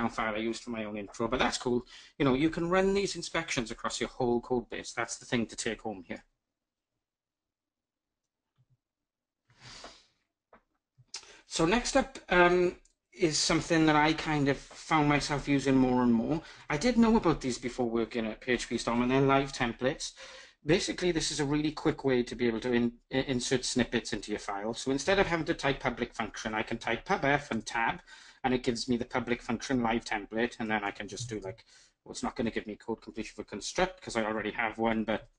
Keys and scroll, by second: 27.1 Tab, 34.0 ctrl+alt+shift+Left.